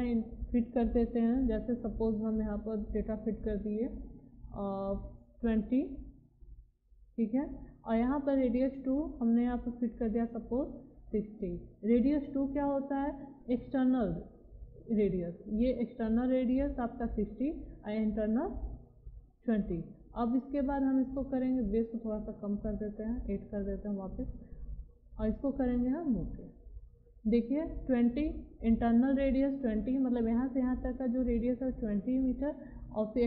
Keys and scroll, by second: 6.1 2, 6.9 0, 11.0 6, 11.7 0.